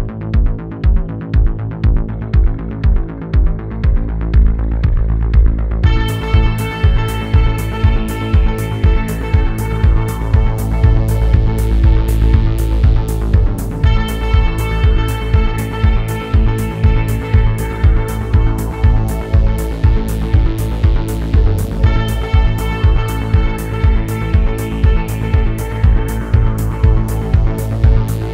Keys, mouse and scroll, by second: 0.0 scroll up 3, 0.1 shift+middle click, 0.4 click, 1.2 shift+middle click, 1.4 f, 1.7 t, 2.0 middle click, 2.3 click, 2.5 middle click, 2.7 click, 3.1 KP_3, 3.3 click, 4.1 middle click, 4.3 click, 4.5 KP_3, 4.7 shift+middle click, 4.7-5.1 scroll up 2, 5.1 click, 5.4 ctrl+z, 5.5 click, 6.3 shift+middle click, 6.5 click, 7.2 click, 7.4 scroll down 4, 7.6 shift+middle click, 7.6 scroll up 3, 7.7 middle click, 7.9 click, 8.1 f, 8.1 click, 8.4 shift+middle click, 8.5 click, 9.1 middle click, 9.2 click, 9.5 middle click, 9.6 click, 9.9 shift+middle click, 10.1 click, 10.6 shift+middle click, 10.9 f, 11.0 click, 11.5 scroll down 2, 11.5 middle click, 11.8 click, 12.1 middle click, 12.2 click, 12.5 middle click, 12.6 click, 12.8 scroll down 3, 12.9 middle click, 13.0-14.1 scroll up 3, 13.1 middle click, 14.1 click, 14.2 f, 14.5 ctrl+z, 14.6 click, 15.0 scroll up 1, 15.2 click, 15.9 scroll down 2, 15.9 shift+middle click, 16.0 scroll up 2, 16.1-17.2 drag, 17.2 shift+middle click, 17.4 scroll up 2, 17.6 scroll down 2, 17.7 shift+middle click, 17.7 scroll up 1, 17.8 shift+middle click, 18.1 KP_1, 18.3 shift+middle click, 18.5 scroll up 1, 18.7 scroll down 2, 18.7 shift+middle click, 18.9-19.3 scroll up 1, 19.3-20.3 drag, 20.3 ctrl+z, 20.4 click, 20.9 shift+middle click, 21.0 f, 21.3 click, 21.6 middle click, 21.8 click, 22.0 shift+middle click, 22.4 click, 22.8 scroll down 2, 22.9 shift+middle click, 23.4 f, 23.5 shift+middle click, 23.6 click, 24.0 scroll down 5, 24.0 middle click, 24.4 f, 24.7 click, 25.1 middle click, 25.3 click, 25.5 middle click, 25.7 click, 26.1 middle click, 26.3 click, 26.6 middle click, 26.7 click, 27.0 middle click, 27.2 click, 27.5 middle click, 27.7 scroll up 1, 27.8 click, 28.1 middle click, 28.2 scroll up 1.